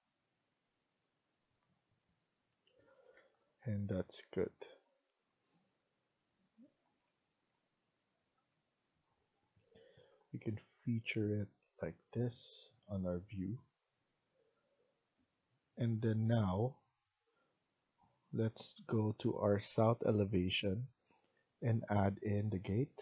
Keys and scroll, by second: 2.8 Escape, 3.1 Escape.